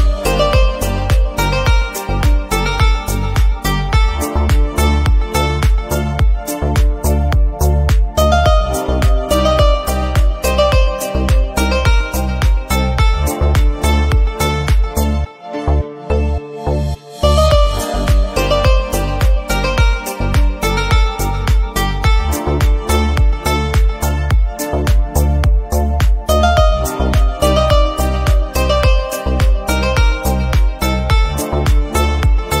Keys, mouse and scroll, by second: 0.7-1.3 middle drag, 2.4-2.9 scroll up 2, 2.6 shift+middle click, 2.9-3.4 shift+middle drag, 3.4 scroll down 2, 3.5-3.9 shift+middle drag, 3.9 scroll up 2, 4.0-4.6 middle drag, 4.8 click, 5.2 shift+d, 5.4 right click, 5.9 r, 6.5 KP_1, 6.8 g, 7.5 scroll up 2, 7.7 scroll down 2, 7.8 a, 7.9 s, 8.4 g, 9.2 middle click, 9.4-9.8 scroll up 2, 9.8 Tab, 9.9 middle click, 10.1-10.5 scroll down 1, 10.5 click, 10.9 shift+d, 11.2 r, 11.9-12.4 middle drag, 12.4 Delete, 12.5 click, 12.7 right click, 13.2 shift+d, 13.4 r, 14.2 Tab, 14.2 a, 14.6 s, 15.4 alt+z, 15.7 g, 16.6 s, 17.6 alt+z, 17.9 ctrl+KP_3, 18.1-18.7 scroll up 9, 18.2 shift+middle click, 18.4 shift+middle click, 18.7 g, 19.4 Tab, 19.4 right click, 19.7 middle drag, 19.9-20.7 scroll down 4, 20.3 middle click, 20.7 g, 21.2 shift+middle click, 21.3-22.2 scroll down 3, 21.6 shift+middle click, 22.2 scroll up 1, 22.4 middle click, 22.6-23.0 scroll down 1, 23.0 Tab, 23.1 scroll up 1, 23.3 3, 23.6 shift+s, 24.2 Tab, 24.4 shift+a, 25.4 scroll down 1, 25.7 s, 27.0 KP_1, 27.2 shift+middle click, 27.3-27.7 scroll up 3, 27.7 g, 28.9 middle click, 29.2 click, 29.4 scroll down 1, 29.4 Tab, 29.5 a, 29.7 alt+s, 30.2 Tab, 30.3 click, 30.8 a, 30.9 click, 31.1 s, 31.6 g, 32.5-32.6 scroll down 6.